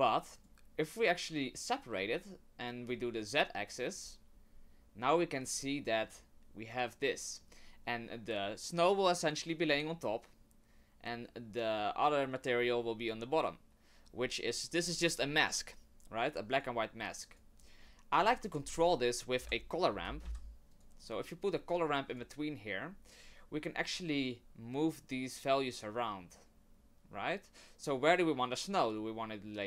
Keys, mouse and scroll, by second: 0.3 click, 2.9 click, 5.5 middle click, 16.3 click, 17.0 click, 17.6 click, 18.5 shift+a, 25.8 click.